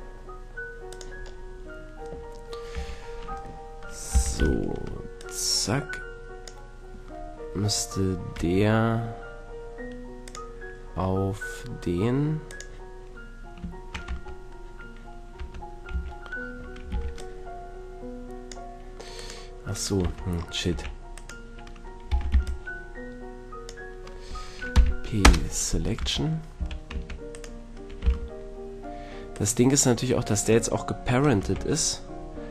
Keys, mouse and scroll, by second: 1.0-2.1 drag, 2.7 a, 4.1 z, 4.5 b, 8.4 Tab, 10.3-14.2 drag, 14.1 Tab, 15.4 Tab, 15.9 a, 16.9 b, 19.1 click, 20.0 Tab, 20.7 a, 22.3 b, 24.7 p, 26.0 a, 26.6 a, 26.9 Tab, 27.3-29.0 right drag, 28.0 g, 31.4 a.